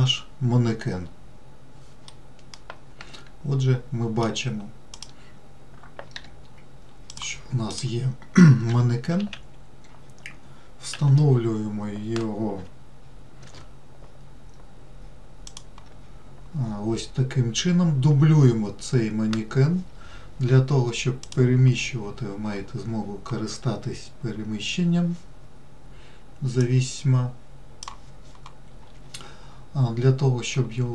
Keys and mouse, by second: 2.4-4.6 middle drag, 5.3 click, 6.5 g, 9.0 g, 21.6 click, 27.1-28.2 drag.